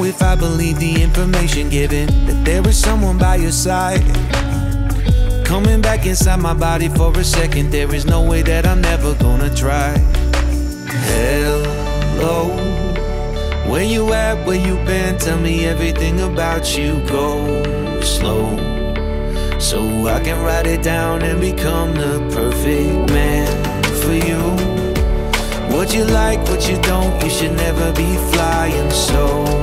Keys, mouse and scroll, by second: 0.3 s, 1.8 click, 2.5 click, 3.8-10.4 drag, 10.6-11.2 drag, 11.9-14.1 drag, 14.5 click, 15.0 click, 15.7-18.7 drag, 19.5-21.7 drag, 21.7-22.4 scroll down 5, 22.4-26.9 drag, 27.3 click, 28.2 click, 28.3-29.6 drag.